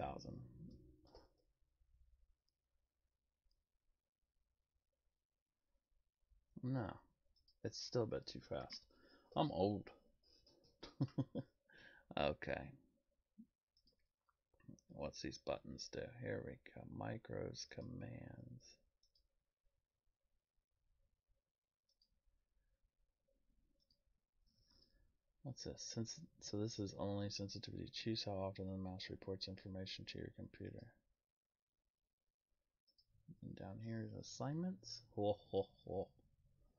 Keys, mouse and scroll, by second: 7.3 right click, 7.4 click, 13.8 click, 17.7 click, 19.0 click, 21.9 right click, 23.7 right click, 24.7 click, 24.7 right click, 30.7 right click, 32.9 click.